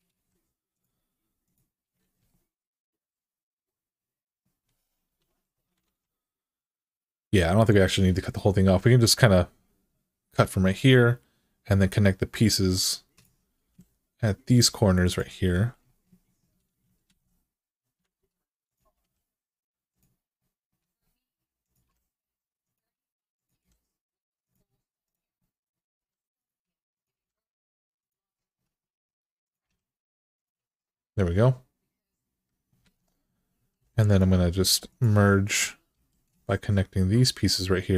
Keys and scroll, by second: 1.8 alt+z, 4.8 1, 5.6 alt+z, 13.4 g, 16.8 alt+z, 18.0 alt+z, 18.7 g, 21.6 g, 23.4 g, 25.7 g, 26.9 g, 29.4 g, 32.6 alt+z, 33.6-34.4 typing, 35.7 e.